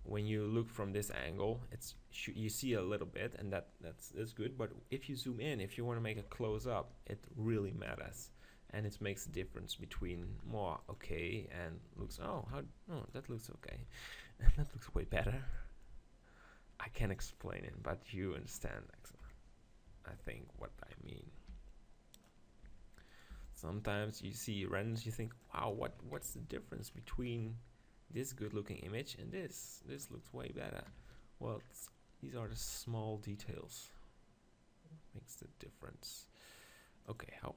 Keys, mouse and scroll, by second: 1.1 KP_0, 1.5 z, 6.3 KP_7, 6.5 z, 9.3 g, 9.9-12.6 drag, 10.1 s, 12.0 s, 12.6 middle click, 13.1 click, 13.7 z, 19.2 KP_7, 20.6 z, 21.0-22.2 middle drag, 21.5 g, 22.2-24.0 drag, 22.7 Tab, 23.1 right click, 23.3 b, 24.0 middle click, 24.2-26.4 right drag, 26.4 click, 26.9-28.1 middle drag, 28.1-30.0 drag, 31.7-33.6 middle drag, 32.5 e, 37.2-37.5 drag.